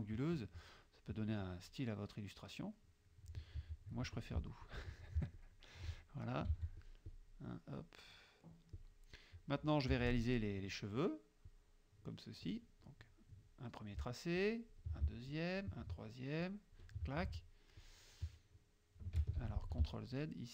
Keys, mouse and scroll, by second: 1.1 middle click, 1.5 click, 2.8 click, 3.6 ctrl+z, 4.2 ctrl+click, 4.7 ctrl+click, 5.4 ctrl+click, 5.9 ctrl+click, 6.6 ctrl+a, 6.9 ctrl+click, 7.2 ctrl+click, 7.9 click, 8.8 click, 10.0 F6, 11.5-12.7 drag, 14.5 shift+click, 15.4 shift+click, 16.5 shift+click, 17.9-19.2 shift+drag, 19.4 ctrl+shift+z, 20.2 shift+click.